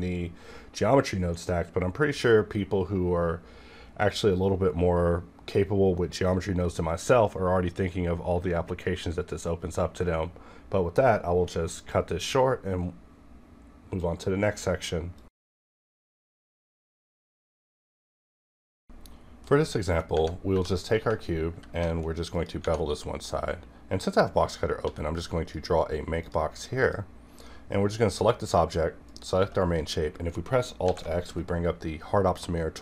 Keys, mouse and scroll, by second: 20.1 Tab, 20.4 2, 20.7 click, 20.8 click, 21.4 ctrl+b, 22.3 click, 22.7-24.1 scroll up 1, 24.1 click, 25.9 a, 26.2 click, 29.1 shift+click, 30.8 alt+x.